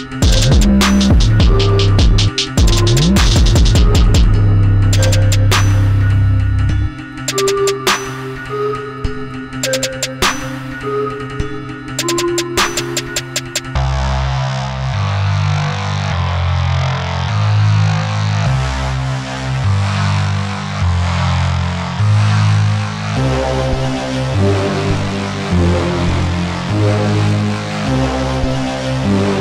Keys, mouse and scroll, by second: 2.7 click, 5.3 click, 8.0 scroll down 1, 14.9-15.5 scroll down 1, 20.0 ctrl+alt+click, 24.5 click, 27.7 ctrl+z.